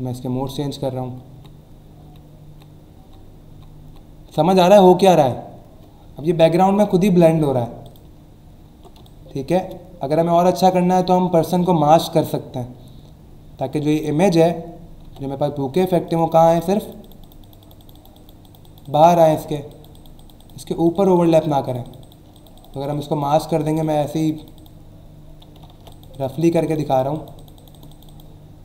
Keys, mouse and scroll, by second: 6.7-7.3 alt+scroll up 1, 7.8 click, 8.2-8.7 alt+scroll up 2, 9.0 space, 9.0 click, 9.5 space, 13.9 click, 15.0 p, 16.0 click, 16.5 click, 16.8 click, 21.7 click, 22.3 click, 25.7 ctrl+z, 25.9 click, 26.7 click.